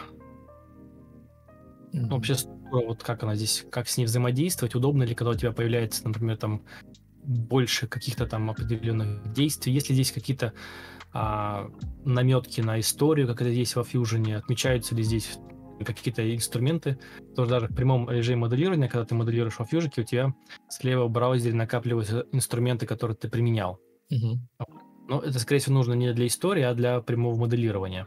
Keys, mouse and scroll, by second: 16.4 ctrl+alt+shift+v, 17.1 ctrl+z, 17.4 ctrl+v, 25.7-27.7 typing.